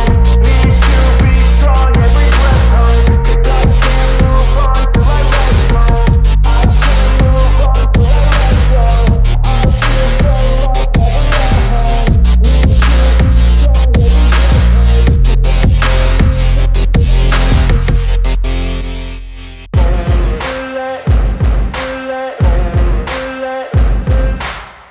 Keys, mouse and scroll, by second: 5.5 click, 9.1 z, 9.3 click, 14.4-16.5 typing, 17.3 ctrl+shift+click, 17.5 ctrl+e, 18.0 click, 19.6 z, 20.2 click, 20.7 space, 21.0 click, 21.2 space.